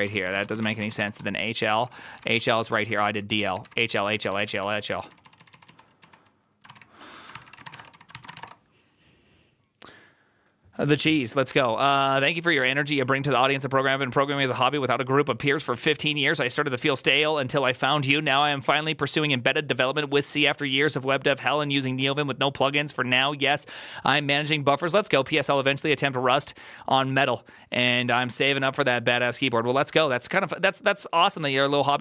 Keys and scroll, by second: 0.0-8.7 typing, 6.5 ctrl+o, 7.2 ctrl+r, 7.2 ctrl+c.